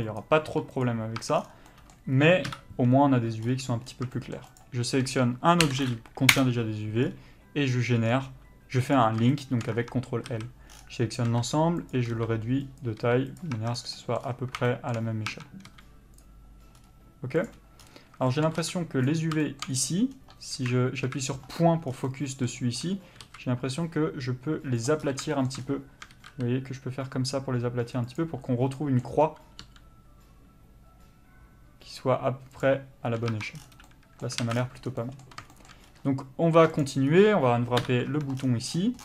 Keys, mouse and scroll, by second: 0.2 click, 0.5 g, 1.2 Tab, 1.4 scroll down 1, 1.7 middle click, 2.5 KP_Divide, 3.5-3.9 scroll up 1, 3.9 scroll down 1, 4.1 shift+middle click, 4.6 shift+click, 6.3 ctrl+l, 7.0 scroll up 1, 8.0 scroll down 1, 9.0 click, 9.3 shift+middle click, 9.7 scroll up 1, 9.7 Tab, 10.3 a, 11.3 s, 13.5 Tab, 13.7 scroll down 1, 13.9 middle click, 14.2 scroll up 1, 14.7 shift+middle click, 15.3 Tab, 15.7 s, 16.2 click, 19.1 b, 19.4 shift+middle click, 19.7 scroll up 1, 20.1 scroll down 1, 20.5 KP_3, 21.0 KP_Decimal, 21.9 scroll down 1, 22.1 middle click, 23.2 s, 28.8 middle click, 29.7 g, 32.6 click, 33.3 Tab, 33.5 scroll down 1, 33.8 middle click, 34.4 alt+a, 34.5 scroll down 1, 35.0 middle click, 35.8-36.8 scroll up 1, 36.8 click, 37.1 scroll up 1, 37.8 KP_Divide, 38.1 Tab, 38.4 scroll down 1.